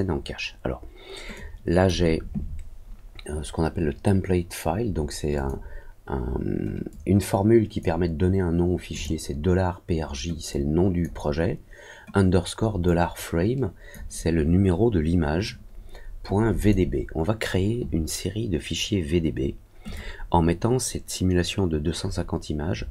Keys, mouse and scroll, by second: 1.3 click, 5.3 click, 6.8 click, 8.9 click, 10.4 click, 12.8-13.8 drag, 16.5 click, 19.8 click.